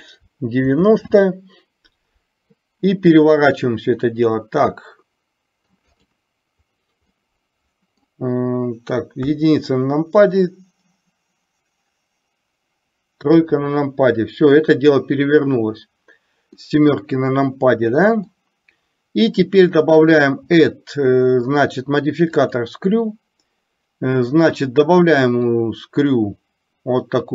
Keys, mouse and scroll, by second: 7.1-8.0 middle drag, 9.3 KP_1, 13.4 KP_3, 16.6-18.4 middle drag, 20.1-22.8 drag, 25.8-27.3 drag.